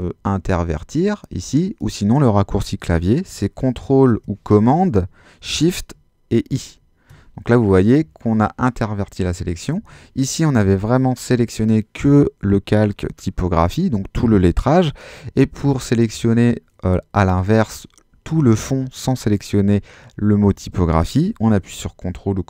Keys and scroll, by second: 6.5 shift+super+i, 9.8 super+z.